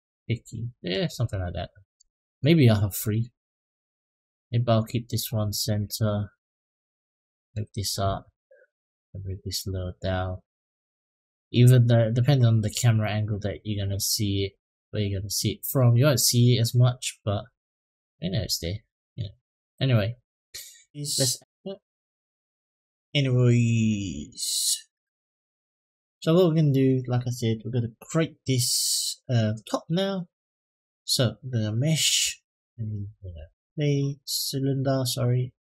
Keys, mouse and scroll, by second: 1.0 click, 1.4 middle click, 2.8 click, 3.5 click, 5.0 click, 5.7 click, 6.5 click, 7.8 shift+d, 8.6 click, 9.5-11.1 drag, 11.3 click, 11.6-15.5 middle drag, 16.4-18.9 middle drag, 19.5-20.3 middle drag, 21.0-26.2 drag, 21.0 scroll down 1, 30.3-33.3 drag, 34.9 click.